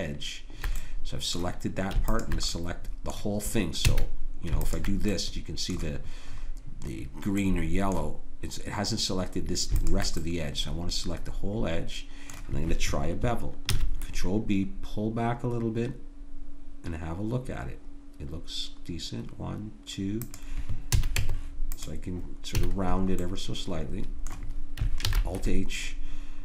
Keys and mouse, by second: 3.9 a, 7.1 middle click, 7.5 middle click, 8.0-9.8 middle drag, 9.8 click, 10.8 click, 11.3 middle click, 11.4 click, 11.7 middle click, 13.8 ctrl+b, 21.0 a, 21.2 Tab, 22.6 a, 22.8 middle click, 24.4 middle click, 25.1 alt+h.